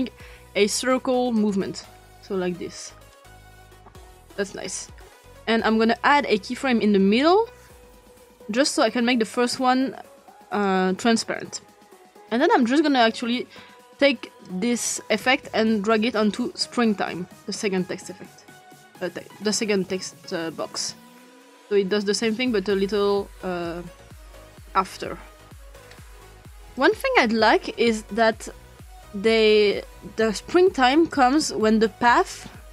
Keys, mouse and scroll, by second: 1.4-4.6 drag, 5.9 click, 7.2 click, 8.6 click, 10.6 click, 14.5-16.2 drag, 18.7 click, 20.0-23.7 drag, 24.9-25.9 ctrl+scroll down 2, 25.9-26.9 ctrl+scroll up 2, 26.7-29.4 drag, 31.1 click.